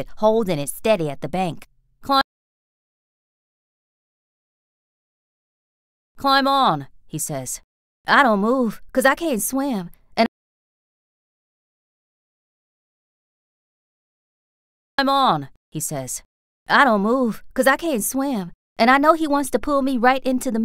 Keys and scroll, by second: 2.1 space, 2.9 b, 5.7 space, 8.1 r, 10.1 space, 10.9 b, 13.5 b, 14.8 space, 17.9 r, 19.9 b.